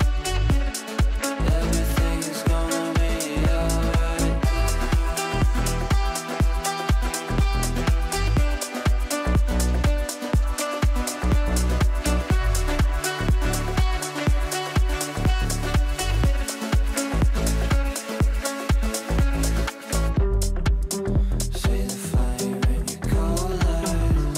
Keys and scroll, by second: 2.2 shift+F2, 2.7 Escape, 13.5 shift+F2, 20.4 F3.